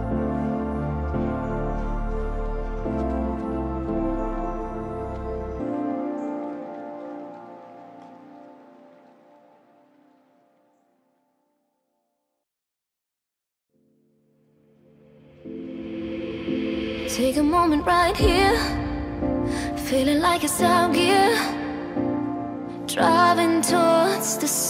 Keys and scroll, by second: 14.3 Return.